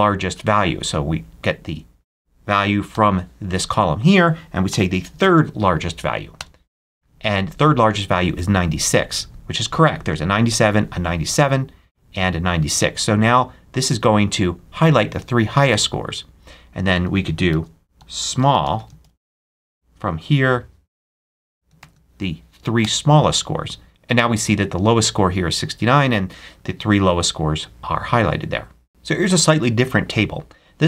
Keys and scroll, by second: 2.8 ', 4.6 3, 5.1 shift+0, 6.2 Return, 17.4 super+a, 17.9 super+s, 18.0-19.4 typing, 20.9-22.2 typing, 22.7 shift+Return.